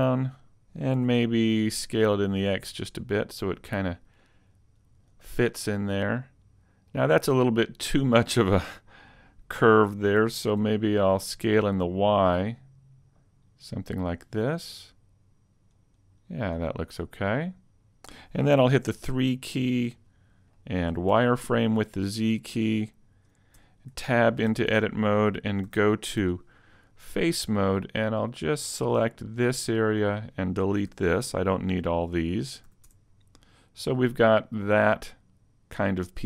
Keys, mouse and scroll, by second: 0.3 click, 0.3 scroll up 4, 1.0 s, 5.1 click, 5.5 middle click, 10.2 s, 13.6 click, 14.7 click, 16.8 middle click, 18.9 KP_3, 20.1 scroll up 2, 20.5 shift+middle click, 21.1 z, 23.5 Tab, 24.1 ctrl+Tab, 25.7 a, 26.2 b, 30.9 x, 32.7 a, 32.8 scroll down 3, 32.8 z, 32.9 Tab, 33.4 middle click.